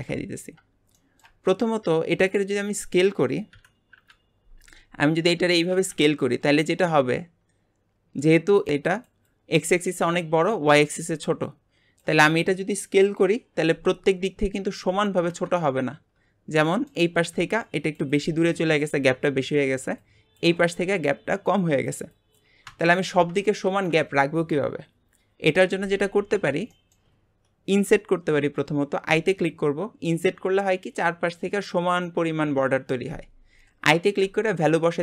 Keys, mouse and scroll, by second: 0.9-2.2 shift+middle drag, 2.2 click, 2.6 middle click, 3.5 KP_1, 3.9 KP_Decimal, 5.2-5.7 scroll up 1, 5.7 s, 16.0-16.6 shift+scroll up 2, 16.6 shift+middle click, 17.0 scroll up 1, 18.4-22.9 scroll up 1, 23.6 ctrl+z, 26.8 shift+middle click, 27.1-27.9 scroll up 1, 27.9 scroll up 1, 29.1 i.